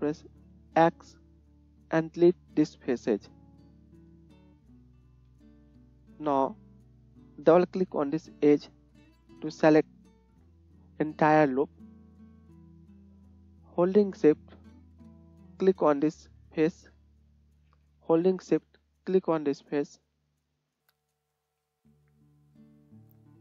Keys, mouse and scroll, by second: 0.8 x, 4.2-5.9 middle drag, 5.1 KP_1, 8.2 click, 8.3 middle click, 8.5 alt+click, 8.6-11.1 middle drag, 11.5 middle click, 11.7 middle click, 13.2-19.6 middle drag, 19.6 shift+click, 19.7-21.9 shift+middle drag, 21.9 shift+click, 22.0 middle click, 22.6 shift+click, 22.7-23.4 shift+middle drag.